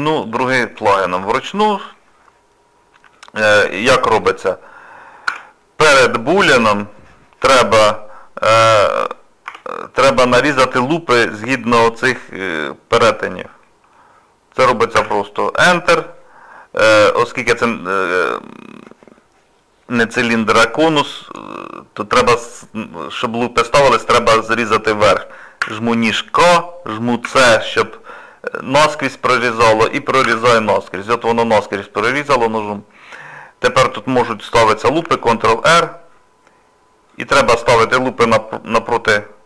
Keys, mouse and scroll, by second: 0.5 shift+middle click, 1.0 middle click, 1.9 middle click, 2.0 shift+middle click, 4.2 click, 5.3 Tab, 9.8-11.5 scroll up 3, 13.6 middle click, 14.3 scroll down 2, 15.0 Tab, 30.8 middle click, 33.0 scroll up 2, 33.2 scroll down 1, 33.5-33.9 scroll up 2, 35.0 ctrl+r.